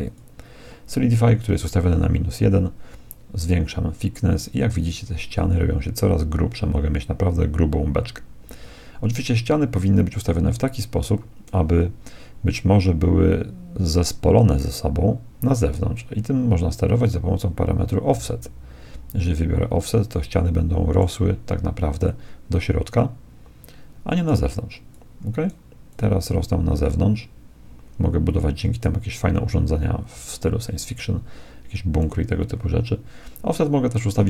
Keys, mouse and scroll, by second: 3.0-4.8 drag, 17.0-18.8 drag, 20.1-21.8 middle drag, 22.0-23.8 drag, 24.9-27.6 drag.